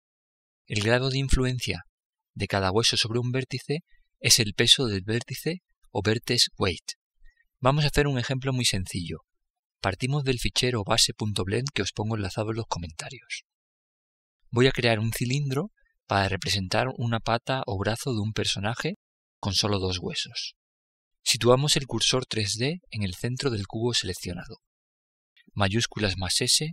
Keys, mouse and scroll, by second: 25.3 shift+s.